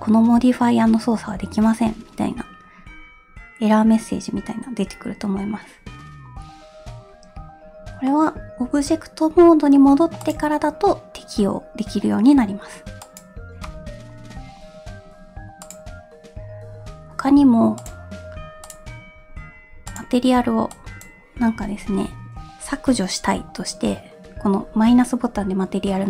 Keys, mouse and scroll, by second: 8.1 middle click, 8.6 scroll up 1, 8.7 Tab, 10.3-13.3 drag, 15.7 click, 17.9 click, 18.7 click, 19.9 click, 22.0 Tab.